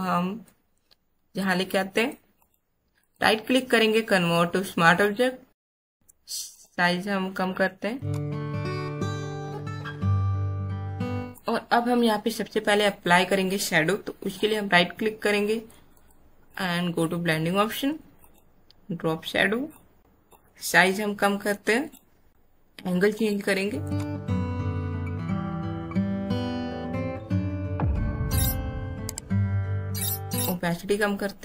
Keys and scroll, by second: 6.4 Caps_Lock, 7.4 shift+Caps_Lock.